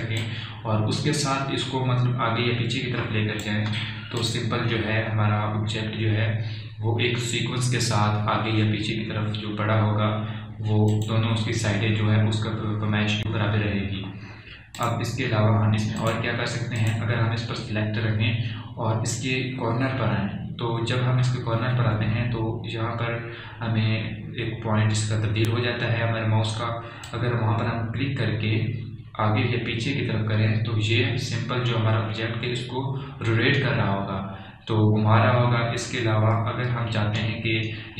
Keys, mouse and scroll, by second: 1.2-5.3 drag, 1.5 typing, 3.6 typing, 11.9 click, 15.9 click, 19.9 click, 28.2-37.9 drag, 30.6 typing.